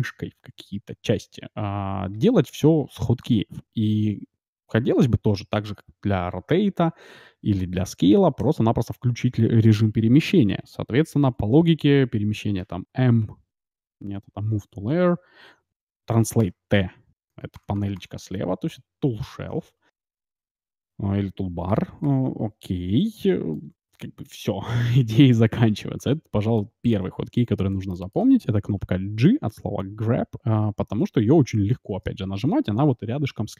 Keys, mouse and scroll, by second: 4.4-6.5 middle drag, 6.1 r, 13.2 m, 16.4-19.5 typing, 20.5 middle click, 20.8-21.6 scroll down 1, 21.6-22.6 scroll down 1, 21.6 t, 22.0 t, 22.8-23.1 scroll up 1, 23.1-24.9 middle drag, 26.2-29.8 middle drag, 29.2 g.